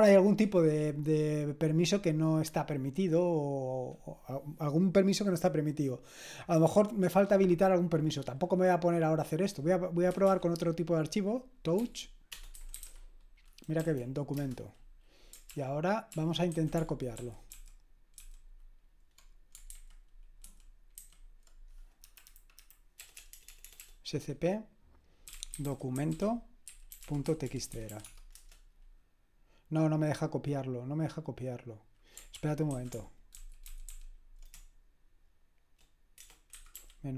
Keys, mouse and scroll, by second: 9.9-10.7 typing, 11.8-13.3 typing, 13.8 Right, 14.3 Return, 15.5 ctrl+p, 16.1 ctrl+p, 16.6 ctrl+a, 17.2 alt+f, 17.5 alt+f, 17.5 typing, 18.2 alt+f, 19.6 typing, 20.4 alt+b, 22.7-23.8 typing, 25.1-28.4 typing, 32.4 ctrl+p, 32.7 ctrl+a, 33.4 alt+f, 33.7 alt+f, 33.9 alt+f, 34.5-37.1 typing.